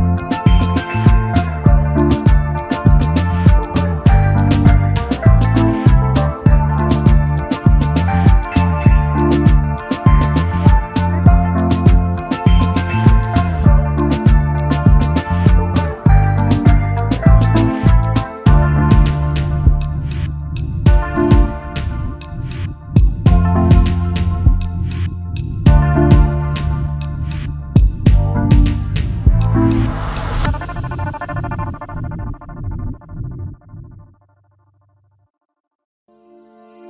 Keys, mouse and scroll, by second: 1.0 double click, 1.3 alt+scroll down 1, 5.8 alt+scroll up 1, 5.9 alt+scroll down 1, 5.9 alt+scroll up 1, 7.7 shift+click, 9.6 double click, 14.3 alt+scroll down 1, 17.3 right click, 20.0 shift+click, 22.8 alt+scroll down 1, 23.9 space, 24.0 double click, 24.6 alt+scroll down 1, 25.2 double click, 25.6 space, 26.3 space, 27.0 alt+scroll down 1, 27.7 alt+scroll up 1, 28.1 space, 31.1 ctrl+g, 31.8 space.